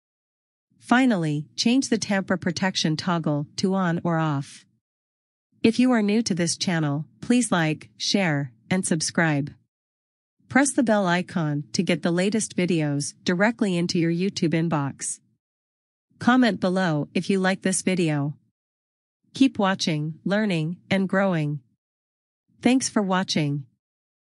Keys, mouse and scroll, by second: 1.6 scroll down 1, 2.3-2.7 scroll up 1, 3.2 scroll down 1, 4.9 scroll up 1, 11.1 click.